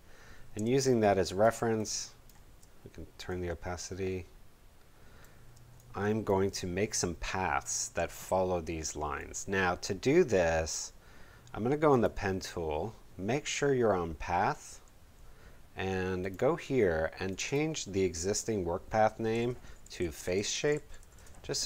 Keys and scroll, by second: 0.5 space, 5.5 space, 19.5-21.5 typing.